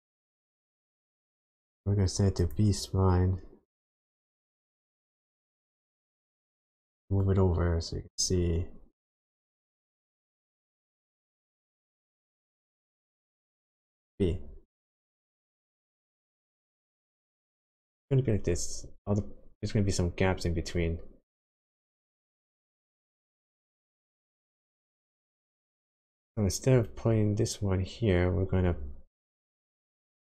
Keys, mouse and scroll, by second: 0.5 click, 4.2 click, 12.5 click, 15.1 click, 22.2 click, 24.7-25.2 scroll down 4, 25.4 middle click, 29.1 ctrl+right click.